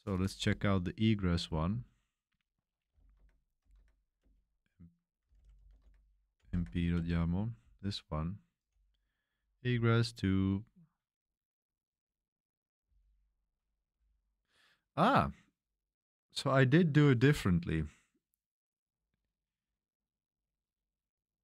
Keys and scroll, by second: 1.4-10.3 typing, 12.8 k.